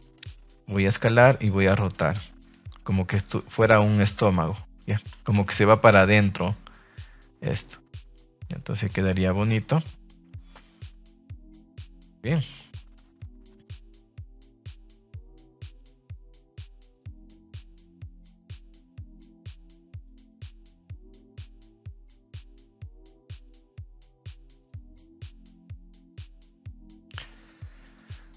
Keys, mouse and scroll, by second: 0.0 click, 1.0 click, 1.8 click, 3.0 click, 3.7 click, 4.9 click, 5.5 Tab, 5.8-7.4 middle drag, 7.6-8.1 middle drag, 8.4-8.8 middle drag, 9.3 Tab, 9.6-11.6 middle drag, 11.6 Tab, 12.1 middle drag, 12.7-13.0 middle drag, 13.4 shift+middle drag, 14.0 middle click, 15.1 shift+middle drag, 15.8 middle click, 21.9-22.8 middle drag, 23.2 shift+middle drag, 23.8 middle click, 24.0 shift+middle drag, 24.6-26.4 middle drag, 26.7 ctrl+s, 26.8 middle drag, 27.3 shift+middle click, 27.5-28.0 middle drag.